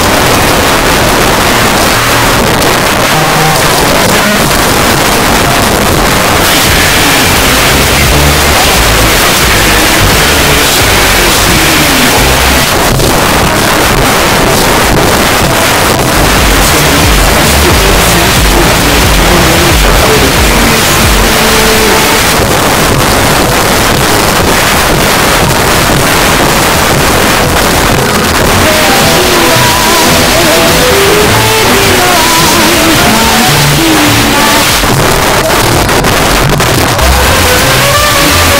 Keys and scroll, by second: 1.6 s, 1.7 Up, 1.9 Up, 2.1 Up, 2.2 Up, 2.4 Up, 2.6 Up, 2.6 Return, 12.7 Page_Down, 22.2 Page_Down, 34.6 Page_Down.